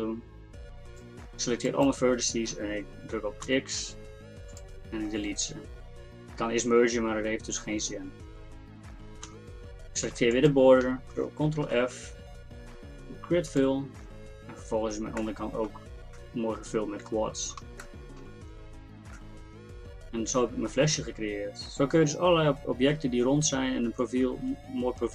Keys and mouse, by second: 3.5 x, 9.3 z, 11.7 ctrl+f, 15.2 middle click, 18.4 Tab.